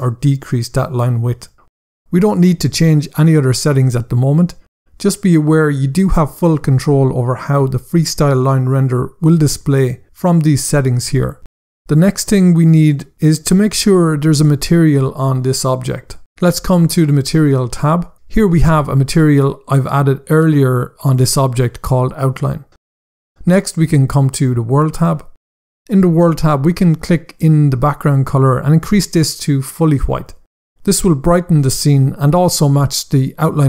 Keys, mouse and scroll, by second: 14.4 click, 17.0 click, 24.2 click, 26.7 click, 28.9 click.